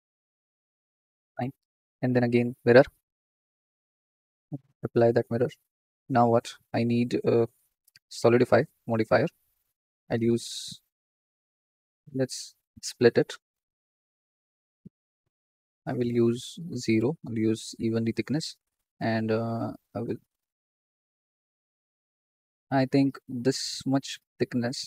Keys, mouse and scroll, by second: 0.8 Tab, 1.2 click, 2.4 drag, 3.7-6.2 drag, 6.2 scroll down 1, 9.0-10.1 drag, 10.2-11.4 middle drag, 12.2 right click, 13.8 z, 14.7 scroll up 2, 14.9-16.3 shift+middle drag, 16.3-17.7 drag, 19.5-21.5 drag.